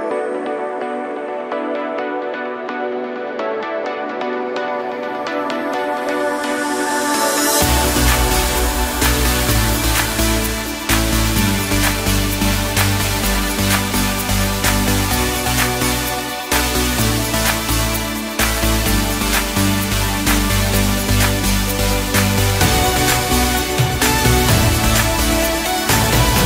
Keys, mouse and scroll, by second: 1.7 shift+b, 4.8-5.9 scroll down 10, 5.9 KP_1, 6.9 KP_7, 7.6-8.0 scroll up 1, 8.0 Tab, 8.7-9.2 scroll down 3, 9.2-10.5 middle drag, 10.5 KP_7, 11.2 Tab, 12.5 KP_Decimal, 13.3-14.3 scroll down 2, 14.3 3, 15.1 click, 16.3-18.9 middle drag, 18.9 ctrl+i, 22.3 middle click, 23.2 click, 23.4 click, 24.5 shift+click, 24.7 shift+click, 25.2-26.4 middle drag.